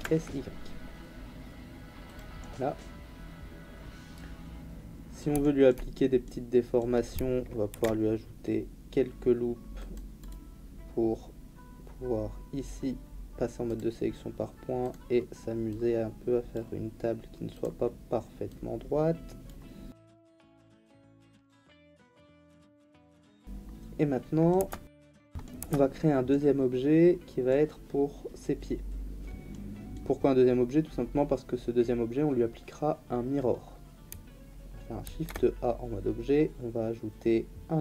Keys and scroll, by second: 7.7 ctrl+r, 22.2 Tab, 24.6 Tab, 35.0 shift+a.